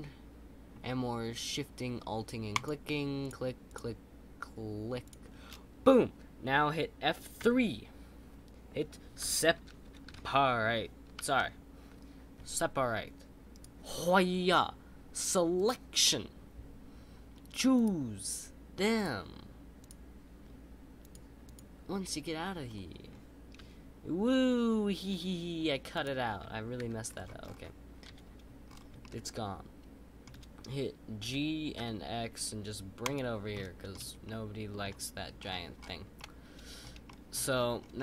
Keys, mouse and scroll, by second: 2.5 alt+shift+click, 11.4 BackSpace, 18.9 click, 21.5-22.1 drag, 22.6-23.6 scroll down 4, 23.6 g, 26.8 ctrl+z, 27.0-28.0 scroll down 4, 28.0 KP_7, 28.6-29.0 scroll down 3, 29.0-31.2 shift+middle drag, 31.2 g, 33.5-34.1 shift+middle drag, 34.1 scroll up 1, 34.2-35.3 middle drag, 35.3-36.1 scroll up 11, 36.1-37.3 middle drag, 37.3-37.9 scroll up 5, 37.9-38.0 middle drag.